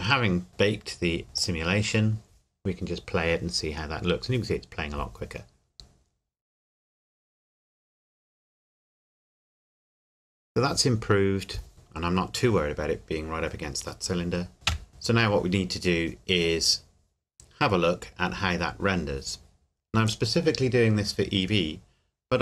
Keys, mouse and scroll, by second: 1.5 click, 14.7 KP_1, 20.1 click.